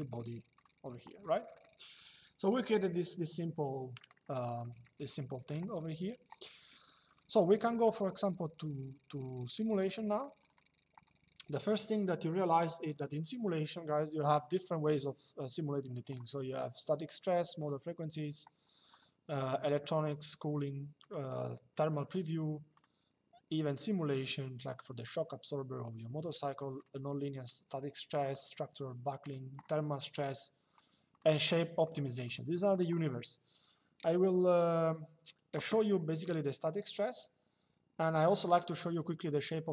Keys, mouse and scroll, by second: 3.9 middle click, 4.6 middle click, 6.8 click, 10.1 click, 17.3 click, 18.6 click, 20.7 click, 22.5 click, 26.5 click, 27.9 click, 30.8 click, 35.9 click.